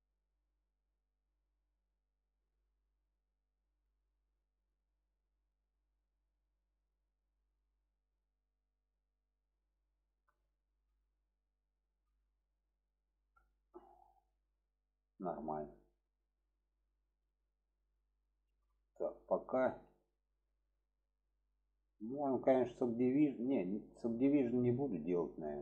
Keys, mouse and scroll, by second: 0.7 click, 2.3 click, 3.1 middle click, 4.6 click, 5.2 click, 5.6-7.0 drag, 7.4-9.4 middle drag, 10.4-10.8 shift+middle drag, 12.4-13.1 middle drag, 13.4 shift+middle drag, 17.8 click, 18.2 shift+middle drag, 19.6-20.0 shift+middle drag, 22.3 shift+middle click, 23.8 shift+middle click.